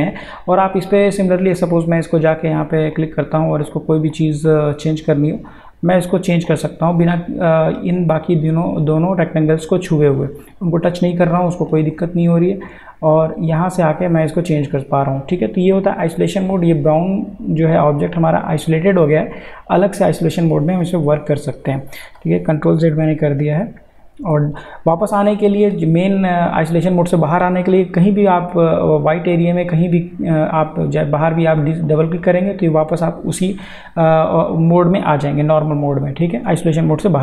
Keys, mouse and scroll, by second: 0.9-7.5 drag, 13.5-14.7 drag, 20.1 click, 20.4 ctrl+z, 31.5 ctrl+z, 33.8 click.